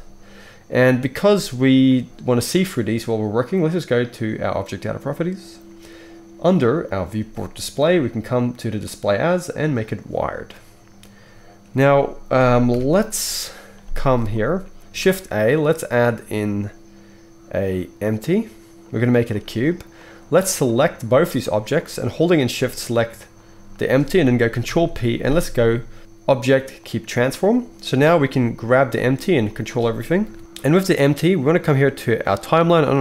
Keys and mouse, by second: 0.1-10.8 right drag, 4.5 click, 4.5 middle click, 6.9-10.8 drag, 6.9-10.8 middle drag, 12.7 KP_1, 14.9 shift+a, 19.2-20.6 middle drag, 20.6-21.3 right drag, 21.3 shift+middle click, 21.5-29.6 right drag, 24.6 ctrl+p, 27.9-28.7 drag, 28.7 g, 29.6-31.7 middle drag, 30.2 KP_1, 31.7-33.0 drag.